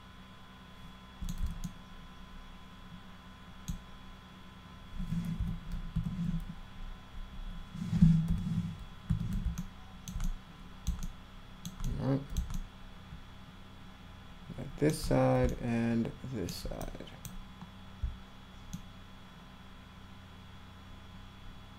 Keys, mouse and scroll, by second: 1.6-3.6 alt+middle drag, 5.4 f, 9.5-10.1 alt+middle drag, 10.2 middle click, 11.0 alt+middle click, 11.8 middle click, 12.5-14.9 alt+middle drag, 15.4-16.5 alt+middle drag, 16.8-17.2 drag, 18.7-21.7 alt+middle drag.